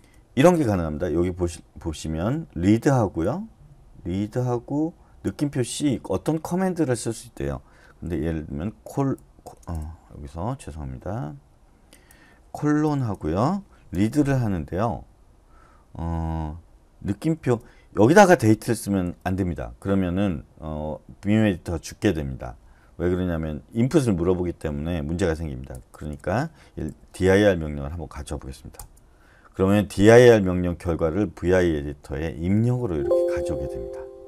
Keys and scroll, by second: 8.9-9.7 typing, 11.5 Escape, 12.8-14.4 typing, 17.1-19.0 typing, 25.7-27.1 typing, 28.8 Return, 31.2-34.2 typing.